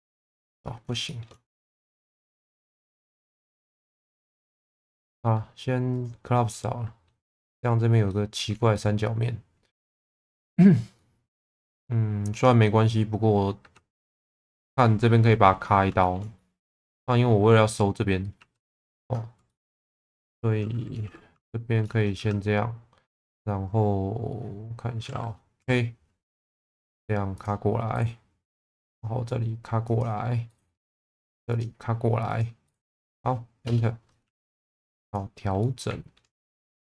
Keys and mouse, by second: 1.1 shift+middle click, 3.7-4.8 middle drag, 5.0 x, 6.5 middle click, 8.2 shift+middle click, 8.8 middle click, 9.9 shift+middle click, 11.0-12.5 middle drag, 13.6 2, 14.1 click, 15.7 middle click, 16.0 shift+middle click, 16.4 middle click, 18.4 2, 18.9 alt+click, 19.5 middle click, 21.3 f, 21.8 middle click, 22.2 1, 25.6 k, 33.1 middle click, 34.3 1, 35.0 click, 35.6 middle click, 36.7 click.